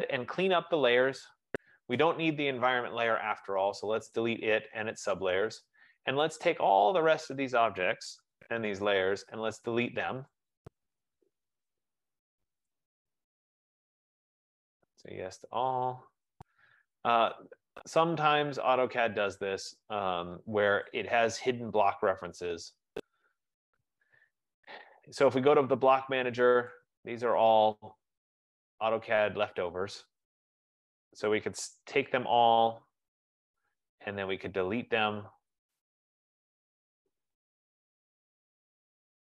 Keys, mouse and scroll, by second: 0.2 right click, 2.5 click, 4.4 click, 6.4 click, 8.6 shift+click, 11.0 click, 13.0 click, 15.4 click, 16.5 F15, 21.1 click, 25.0 click, 27.0 click, 28.3-29.3 scroll, 30.9 click, 32.3 shift+click, 35.9 click, 38.9 click.